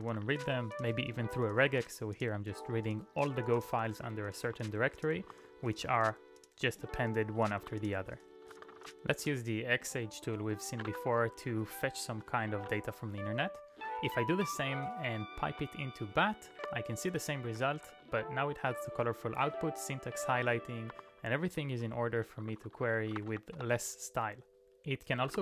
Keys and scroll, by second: 0.0-1.0 typing, 3.5 ctrl+d, 3.8 ctrl+d, 4.0 ctrl+d, 6.5 ctrl+d, 8.2-9.0 typing, 9.2 Return, 10.9 [, 11.4 ctrl+u, 11.6 ctrl+u, 12.0 ctrl+u, 12.6 q, 13.8 space, 16.5-18.3 typing, 19.9-21.0 typing, 21.0 ctrl+d, 21.5 ctrl+d, 21.7 ctrl+d, 22.6-23.9 typing, 25.0-25.4 typing.